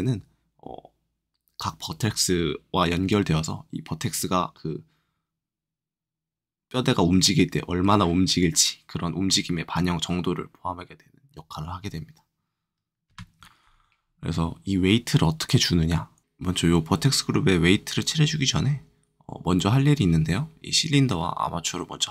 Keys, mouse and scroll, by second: 13.0 KP_Subtract, 13.0 KP_Add, 16.2 KP_Multiply.